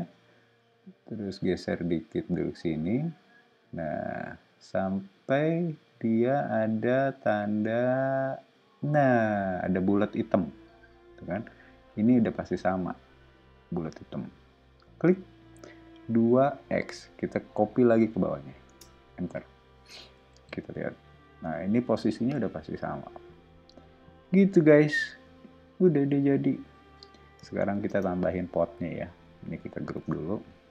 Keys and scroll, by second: 16.3 2, 16.8 x, 18.7 Return, 20.1 o, 27.8 space, 30.0 super+g.